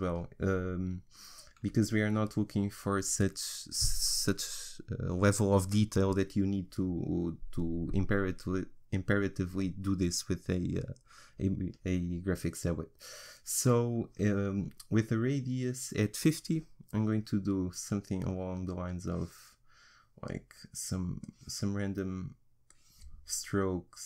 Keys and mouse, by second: 18.3-24.0 drag.